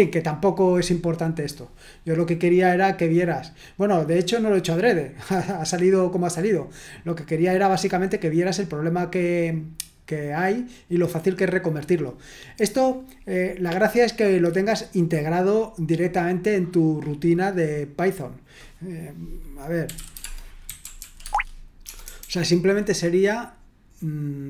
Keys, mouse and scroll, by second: 6.5-8.2 drag, 12.3 click, 19.6-22.2 typing.